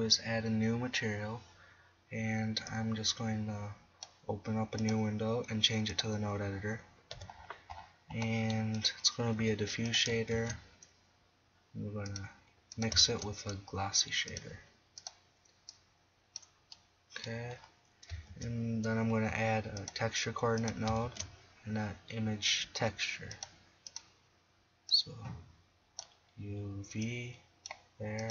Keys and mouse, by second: 1.6-2.7 middle drag, 2.7 click, 2.9 drag, 3.1-3.6 drag, 3.6 click, 4.6 click, 7.1 n, 8.8-9.4 right drag, 9.4 g, 10.3 shift+a, 11.9-12.9 drag, 13.0 shift+a, 14.7-15.7 drag, 18.3 shift+a, 19.8 drag, 20.0 click, 21.0 shift+a, 24.9-26.8 drag, 27.0-28.3 drag.